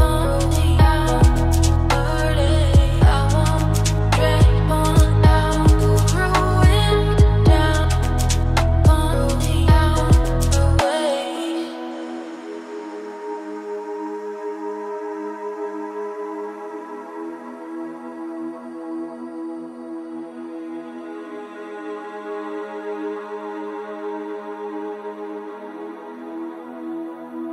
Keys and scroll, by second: 14.7 ctrl+space, 25.2 ctrl+z.